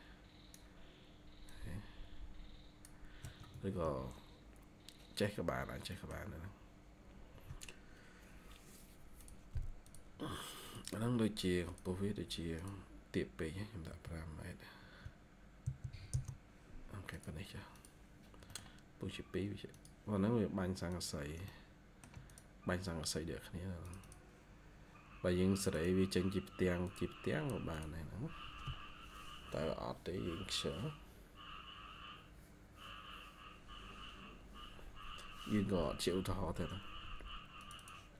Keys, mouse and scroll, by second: 3.4 Escape, 3.7 Escape, 5.5 scroll down 1, 5.8 middle click, 6.1-7.1 scroll down 1, 13.8 typing, 15.5 typing, 16.0 Return, 18.1 scroll down 1, 18.4 middle click, 21.4 shift+middle click, 23.9 double click, 25.6 double click, 37.7 double click.